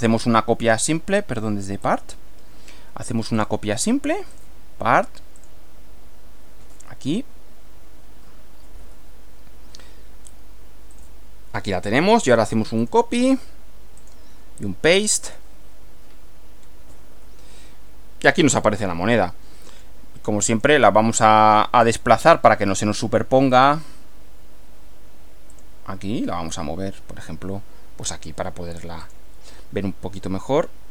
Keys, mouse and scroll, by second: 0.7 click, 1.8 click, 3.4 click, 4.4 click, 5.4 click, 11.0 click, 11.9 click, 12.8 click, 14.0 click, 15.2 click, 18.4-20.0 middle drag, 20.0-20.5 scroll up 1, 20.5 click, 22.2 click, 23.6 click, 25.5 click, 29.1 click.